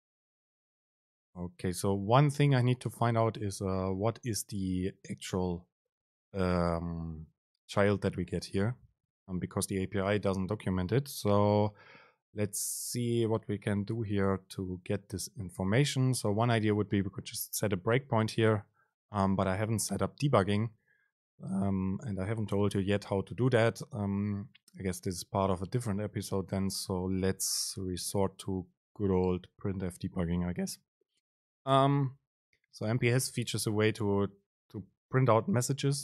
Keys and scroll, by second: 9.0 Return, 9.4 super+space, 32.1 super+space.